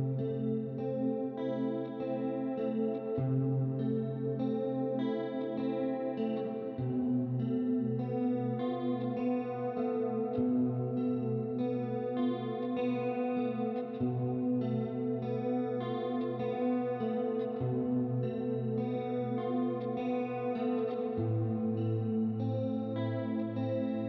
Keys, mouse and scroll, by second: 0.7 click, 2.6 click, 4.5 click, 5.6 KP_6, 5.7 Return, 6.5 click, 8.0 KP_1, 8.2 KP_2, 8.4 Return, 8.9 right click, 10.4 middle click, 12.1 click, 12.9 click, 15.7 click, 18.8 click, 19.6 middle click, 20.5 middle click, 21.4 click, 23.4 click.